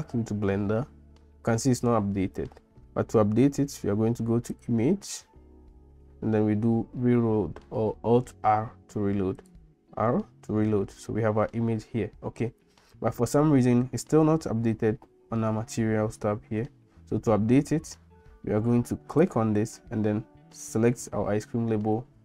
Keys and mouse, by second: 4.5-9.7 drag, 19.3-21.0 drag.